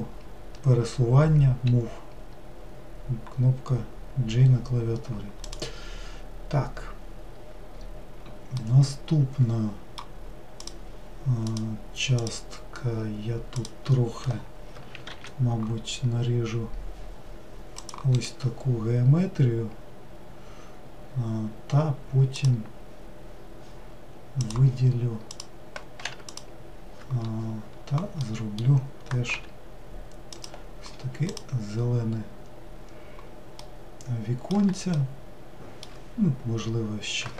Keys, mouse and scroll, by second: 4.9-5.7 scroll down 1, 5.7 click, 8.8-10.8 middle drag, 10.8 click, 11.7 click, 15.1 ctrl+r, 22.6 click, 24.6-26.5 drag, 29.5 g, 31.5 click, 33.9-36.3 middle drag, 36.3-37.3 scroll up 1.